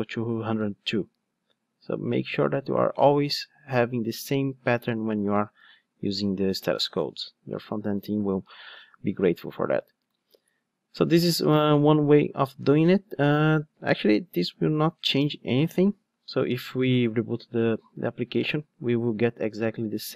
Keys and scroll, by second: 6.8 ctrl+Tab, 15.9 ctrl+r.